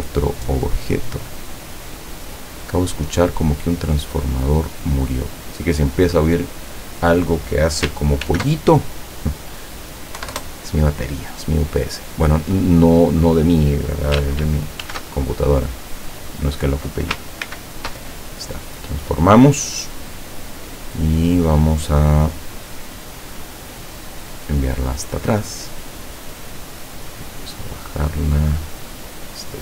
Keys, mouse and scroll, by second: 1.2-5.7 drag, 8.4 ctrl+shift+f, 9.4 click, 10.3 KP_1, 10.4 KP_Enter, 13.2 click, 14.9 ctrl+shift+f, 16.4 click, 17.5 ctrl+shift+c, 20.1 click, 24.4 click, 27.4-29.6 drag.